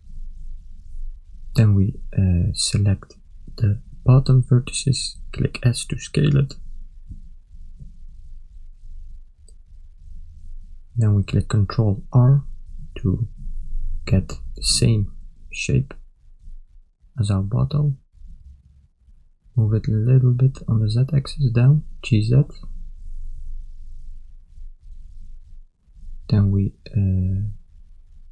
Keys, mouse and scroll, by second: 1.9 a, 3.8 click, 5.8 s, 11.2 a, 12.7 ctrl+r, 15.6 s, 19.7 g, 24.7 a, 25.3 ctrl+middle click, 26.0 shift+middle click, 27.4 click.